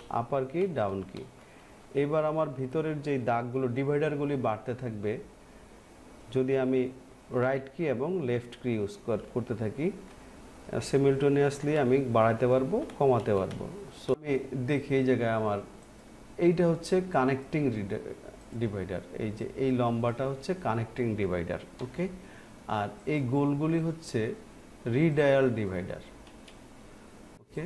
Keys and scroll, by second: 5.6 Left, 10.6 Right.